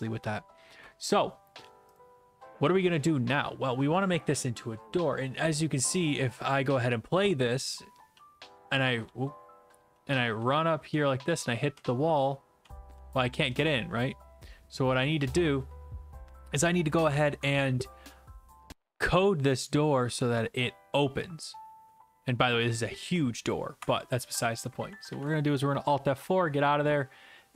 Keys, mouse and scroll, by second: 2.0-8.1 drag, 8.1-8.7 w, 8.8 shift+w, 9.9 w, 10.6 a, 11.9-14.8 typing, 23.8 Escape, 25.1 alt+F4.